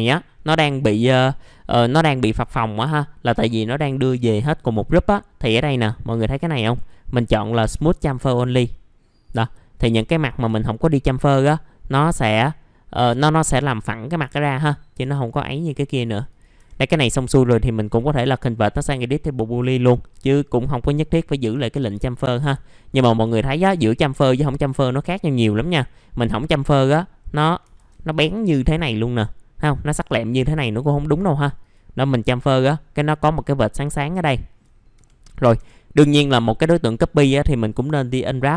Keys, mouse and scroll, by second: 6.7 click, 9.4 alt+middle click, 10.1 alt+middle click, 11.0-11.8 scroll up 1, 11.8-13.1 scroll down 1, 14.3 alt+middle click, 14.6 scroll down 1, 15.1 alt+middle click, 15.8 click, 16.5 F4, 16.8-18.4 scroll up 1, 22.1 middle click, 22.4 F4, 22.7 middle click, 22.9 scroll down 1, 23.3 alt+middle click, 23.9-24.2 scroll up 1, 24.3 alt+middle click, 25.6 click, 28.1 click, 33.9 scroll down 1, 34.3 alt+middle click, 34.9 F4, 36.1 alt+middle click, 36.5-38.5 scroll down 1.